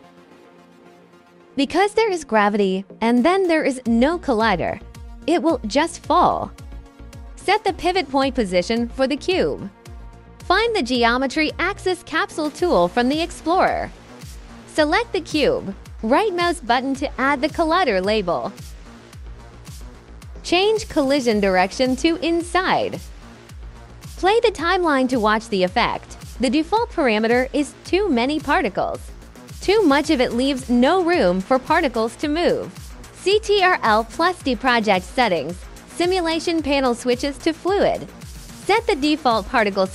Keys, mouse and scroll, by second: 1.2 click, 1.8-2.2 drag, 3.5 alt+click, 4.0-5.1 alt+drag, 7.9 click, 9.2 click, 9.8 click, 10.5-11.4 typing, 11.5 click, 13.5 click, 13.7 alt+click, 14.2 alt+middle click, 14.3 alt+click, 14.6 alt+drag, 15.0 alt+click, 15.1 alt+click, 15.5 right click, 17.8 click, 19.7 click, 21.3 click, 23.0 click, 23.5 click, 26.8 alt+click, 29.7 alt+click, 30.2-30.9 alt+drag, 32.6 ctrl+d, 33.3 click, 34.6 click, 35.6 click, 36.2 click, 37.9 click, 38.0 6, 38.9 click.